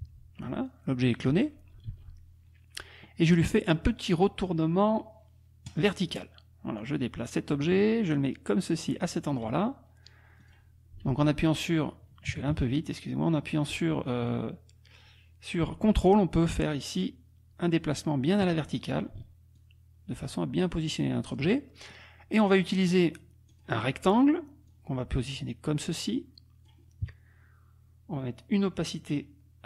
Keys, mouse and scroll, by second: 0.7 click, 1.9 ctrl+z, 5.7 click, 6.8-9.6 drag, 10.4 click, 11.1 ctrl+z, 12.3 KP_Subtract, 12.5 KP_Add, 14.3-18.6 drag, 18.7 ctrl+click, 19.5-21.5 ctrl+drag, 21.8 ctrl+click, 23.6 click, 24.7-26.9 drag, 29.1 right click.